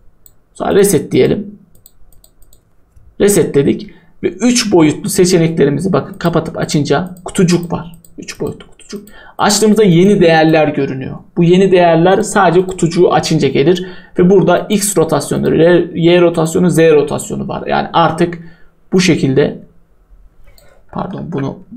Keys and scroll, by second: 21.2 ctrl+z.